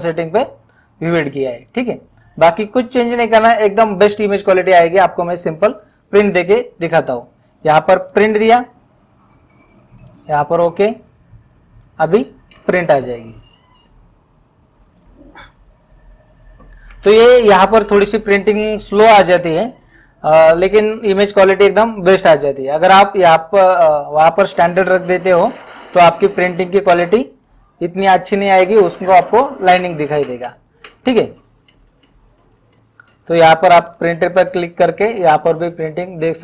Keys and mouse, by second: 1.7 click, 3.0 click, 8.1 click, 10.0 click.